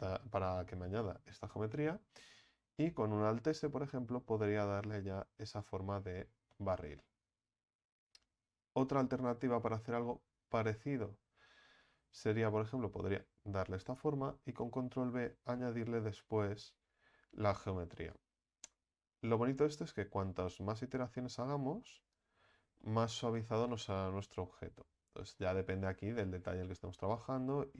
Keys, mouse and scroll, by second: 2.7 alt+s, 5.9 Tab, 6.2-6.5 scroll down 3, 6.5-7.4 middle drag, 7.4 Tab, 7.7-8.4 scroll up 3, 8.4 ctrl+z, 8.8 ctrl+z, 9.0 ctrl+z, 9.5 ctrl+z, 10.5-12.2 middle drag, 12.2 s, 14.5 ctrl+b, 22.5 Tab, 22.8-25.9 middle drag, 25.9 Tab, 27.2 ctrl+z, 27.5 ctrl+z.